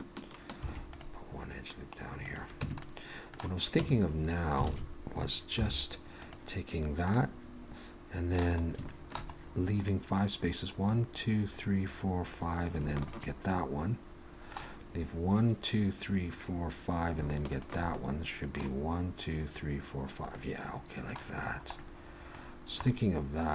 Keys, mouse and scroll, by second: 0.5 ctrl+r, 2.6 Tab, 2.8 middle click, 3.8 Tab, 4.1-4.7 scroll up 2, 4.7 alt+a, 5.6 3, 6.2 click, 6.7-7.1 scroll down 2, 7.1 middle click, 8.9 shift+middle click, 9.3 scroll up 1, 13.0 shift+click, 13.5 middle click, 17.5 shift+click, 17.9 middle click, 20.4 middle click, 21.5-22.5 scroll up 2, 21.7 middle click, 22.5-23.5 scroll down 2, 22.9 middle click.